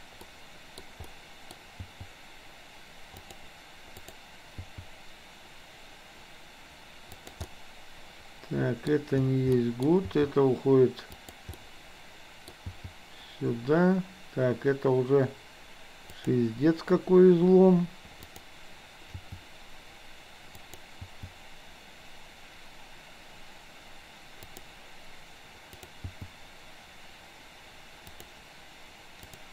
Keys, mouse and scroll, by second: 0.3 middle click, 1.0-1.6 scroll up 1, 1.8 g, 4.1 click, 4.6 g, 7.5 scroll up 1, 7.6-9.0 middle drag, 9.5-10.0 scroll up 1, 10.1 g, 11.7-12.5 middle drag, 12.7 g, 18.3 click, 19.1 g, 21.1 g, 25.8 click, 26.1 g, 29.3 click.